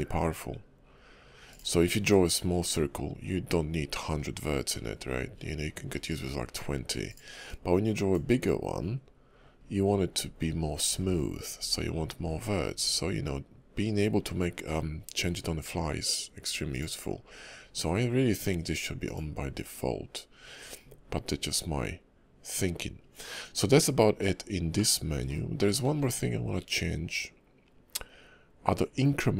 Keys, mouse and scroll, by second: 2.1 click, 7.5 click, 19.0 click, 24.7 middle click, 25.5 shift+middle click, 26.6 click.